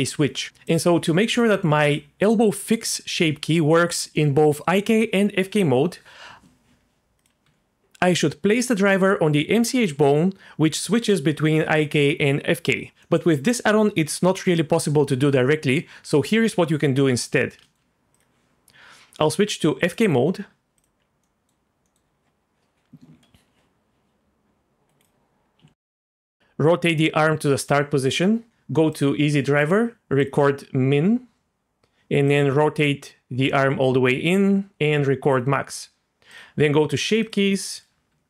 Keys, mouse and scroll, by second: 0.5 Tab, 0.7 click, 1.9-3.9 drag, 7.2 click, 7.4 Tab, 13.0 middle click, 17.1 middle click, 18.1 click, 19.5 click, 20.8 click, 21.2 middle drag, 21.8 middle click, 24.7 click, 25.6 z, 26.2 click, 28.9 click, 30.2 click, 32.3 click, 35.3 click, 36.3 click, 37.2 click, 38.1 Tab.